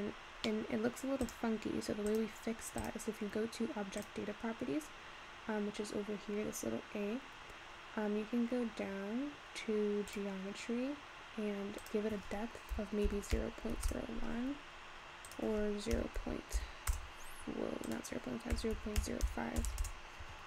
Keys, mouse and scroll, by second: 0.1-0.7 scroll up 3, 0.7 middle click, 0.9-1.2 scroll up 1, 1.2 click, 2.1 click, 2.8 click, 4.0 click, 8.1-10.1 scroll down 14, 10.1-10.6 drag, 10.6-11.2 scroll down 1, 11.2-11.8 scroll down 2, 11.8-14.8 drag, 15.2-20.4 drag.